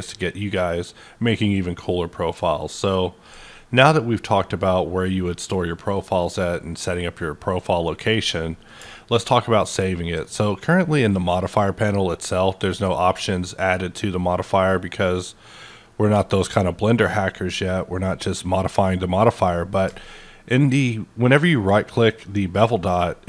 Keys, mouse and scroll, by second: 5.9-10.6 middle drag, 10.6-12.0 scroll down 8, 12.0 scroll up 7, 13.0 click, 15.1 click, 16.1-17.0 scroll down 8, 17.0 scroll up 6, 18.1 click, 22.1 ctrl+right click, 22.9-23.2 drag.